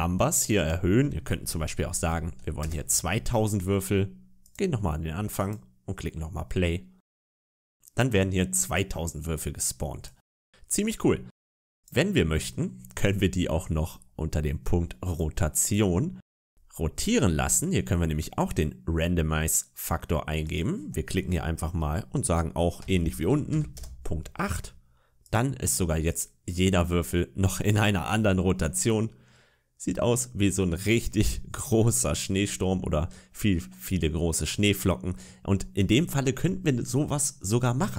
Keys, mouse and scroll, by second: 0.4 click, 0.4-1.8 scroll up 1, 1.8 0, 2.0 0, 4.3 click, 5.2 click, 9.9 click, 11.6 click, 13.3-15.0 scroll down 4, 15.0 click, 15.0 scroll down 2, 15.5 click, 16.2-16.6 scroll down 2, 16.8 scroll up 1, 20.3 click, 25.1 click, 26.0 click, 28.2-28.6 scroll down 2, 28.6 middle click, 30.9 scroll up 2, 31.8 middle click, 33.1-34.1 scroll down 2, 34.2 middle click.